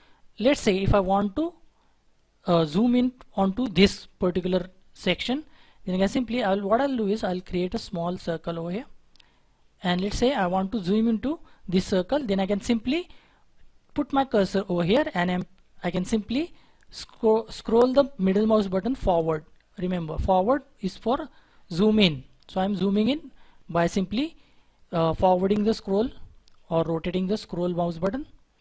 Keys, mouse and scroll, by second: 19.9-22.1 scroll up 1, 22.3-22.8 scroll down 1, 22.9-25.8 scroll up 1.